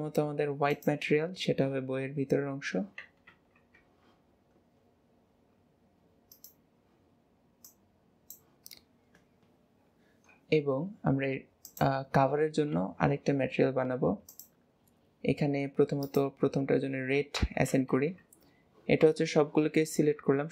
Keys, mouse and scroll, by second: 3.7 Tab, 4.3-4.9 scroll down 3, 5.4-6.3 scroll down 9, 6.3 click, 8.9-9.7 scroll up 10, 11.7-12.7 drag, 12.7 Tab, 14.3-17.3 drag, 17.9 Tab, 19.0 a.